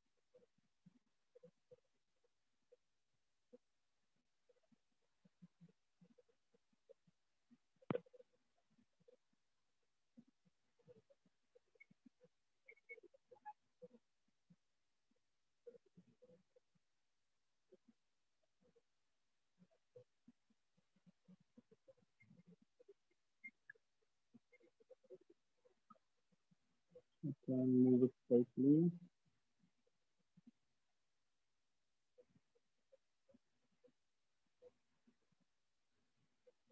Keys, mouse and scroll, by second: 0.1 click, 0.4 click, 0.6 click, 1.2 click, 1.7 click, 2.1 click, 2.7 click, 3.3 click, 3.9 click, 4.3 click, 5.5 click, 7.0 click, 7.3 click, 7.9 click, 8.3 click, 8.5 click, 8.7 click, 9.1 click, 9.6 click, 9.9 click, 14.0 click, 15.5 click, 16.1 click, 16.7 click, 17.2 click, 17.7 click, 18.3 click, 18.7 click, 19.1 click, 20.1-21.9 drag, 22.3 right click, 23.1 right click, 23.9 shift+click, 24.7 alt+click, 25.1 right click, 27.2 click, 28.8 click, 29.5 click, 29.7 alt+click, 30.0 click, 30.4 click, 30.9 click, 31.3 click, 31.7 click, 32.1 click, 32.7-33.6 drag, 34.1-36.7 drag.